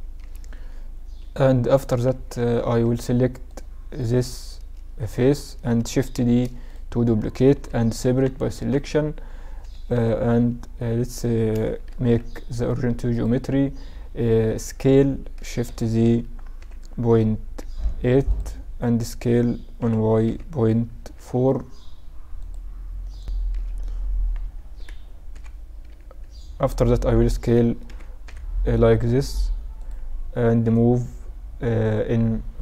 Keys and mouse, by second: 1.2 KP_7, 2.3 Tab, 3.5 click, 3.9 right click, 5.1-6.2 middle drag, 6.2 shift+d, 7.5 p, 8.5 Tab, 8.7 right click, 9.9 KP_7, 14.8 ctrl+alt+shift+s, 19.2 s, 23.6 KP_Add, 24.8 s, 27.5 s, 30.8-32.6 drag.